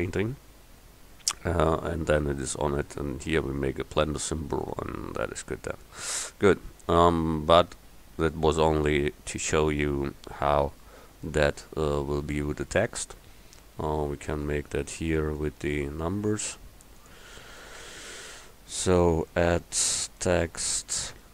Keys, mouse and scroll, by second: 6.0 middle click.